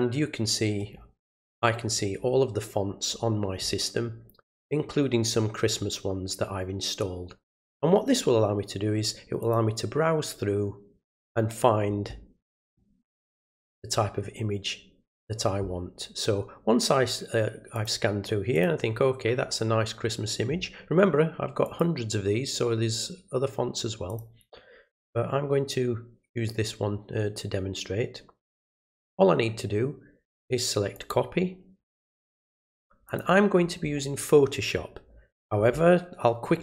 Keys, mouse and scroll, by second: 1.2 scroll up 1, 2.0 scroll down 1, 2.6 middle click, 2.6 scroll down 2, 9.4 click, 11.0 scroll down 1, 12.6 click, 17.7 click, 18.5 click, 21.6 click, 24.1 click, 30.9 click, 33.0 click.